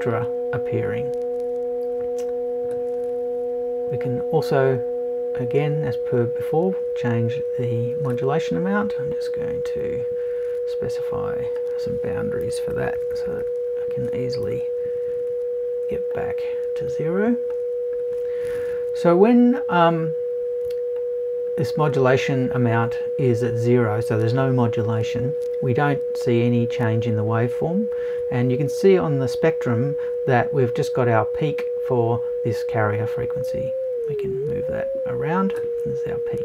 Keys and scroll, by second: 12.4 BackSpace, 14.4 BackSpace.